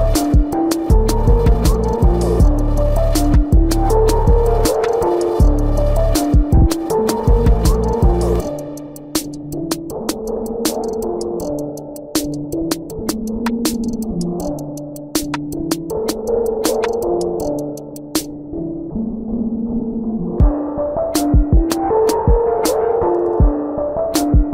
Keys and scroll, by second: 9.2 ctrl+=, 11.9 space, 15.1 space, 16.4 space, 19.0 space, 22.4 space.